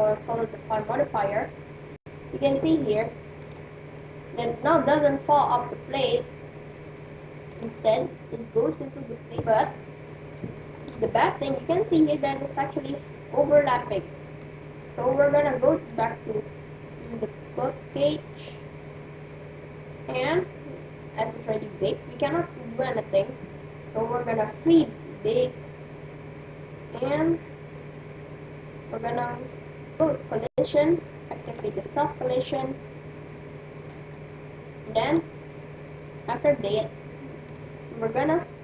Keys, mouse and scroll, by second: 0.8-3.3 middle drag, 3.3-5.1 drag, 7.5-9.1 drag, 7.9 middle click, 9.3-15.3 middle drag, 12.2-13.0 scroll down 1, 15.3-17.7 drag, 19.0-21.8 middle drag, 24.7-26.4 drag, 25.9-30.8 middle drag, 31.5-33.4 drag, 32.4 middle click, 33.4-34.4 middle drag, 35.1-37.0 middle drag.